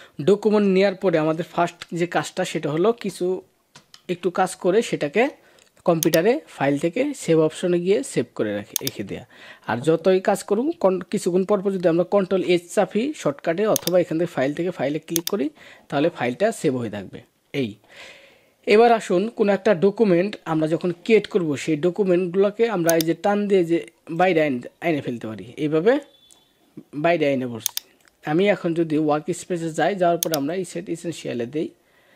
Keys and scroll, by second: 1.0 ctrl+-, 1.7 ctrl+-, 3.6 ctrl+=.